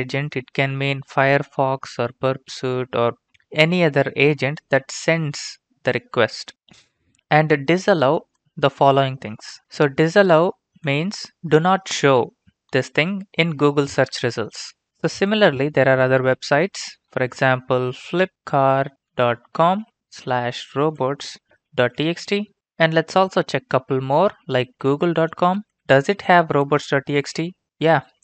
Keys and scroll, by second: 17.6-22.3 typing, 24.4-28.1 typing.